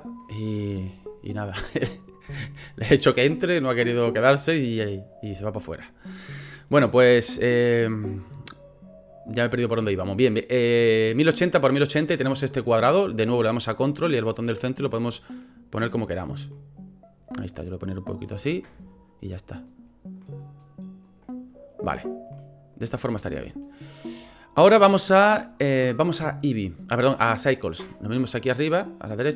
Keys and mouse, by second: 13.5-16.1 ctrl+drag, 16.5-18.3 drag, 18.6-19.6 ctrl+drag, 20.2 ctrl+click, 22.3 click, 23.4 shift+click, 29.1-29.3 drag.